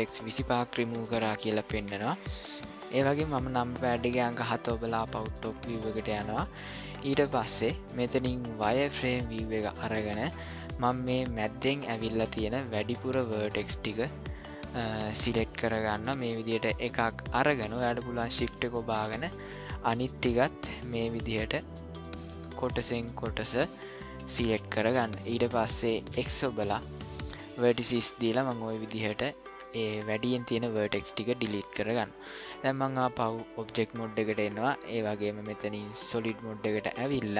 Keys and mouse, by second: 4.2 KP_7, 5.9 ctrl+middle click, 8.6 click, 10.8-12.0 drag, 16.3 click, 19.2-20.3 shift+drag, 20.9 shift+click, 22.0 shift+click, 23.5-24.5 shift+drag, 26.1 x, 32.9 click, 34.3 middle click, 36.1 click.